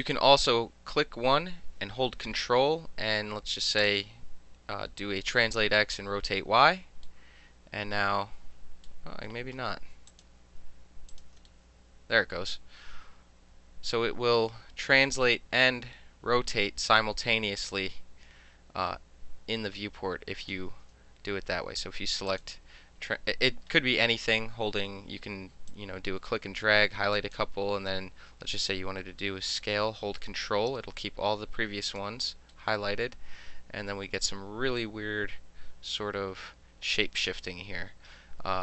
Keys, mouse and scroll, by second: 0.0 click, 0.6 click, 3.8-4.7 ctrl+drag, 7.0 middle click, 9.5 ctrl+z, 10.1 click, 11.1 ctrl+click, 20.4 ctrl+click, 22.3 click, 25.7-27.3 drag, 28.8-31.8 ctrl+middle drag, 31.8 ctrl+click, 31.9 ctrl+middle click.